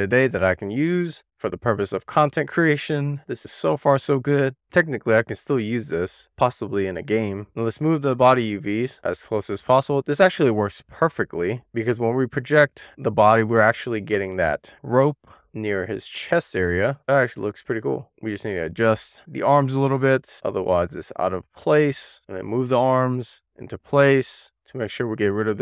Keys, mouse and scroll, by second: 0.4 click, 1.4-1.8 scroll down 3, 1.8 middle click, 2.8 shift+middle click, 3.5 middle click, 4.1 scroll down 2, 4.4 shift+middle click, 4.6 scroll up 3, 4.8 click, 5.5 super+z, 5.7-6.1 scroll down 1, 6.2 click, 6.6-6.9 scroll down 1, 6.9-7.4 scroll up 1, 7.5 click, 7.8 scroll down 1, 8.0 shift+middle click, 8.4 click, 10.8-11.7 scroll up 2, 11.7 click, 13.4 shift+middle click, 13.8 middle click, 15.0 click, 17.0-18.2 middle drag, 18.2 shift+click, 18.6 shift+click, 19.1 super+z, 19.2 middle click, 19.3 scroll down 3, 19.6 scroll up 2, 19.8-20.2 scroll down 1, 20.2 super+click, 20.3 alt+z, 20.5 alt+z, 20.6 super+click, 21.1 middle click, 21.3 click, 21.5 middle click, 21.6 scroll up 2, 21.9 click, 22.1 scroll down 1, 22.3 shift+middle click, 22.7 click, 23.2-24.6 shift+drag, 24.9 super+z, 25.4 click, 25.5 super+z.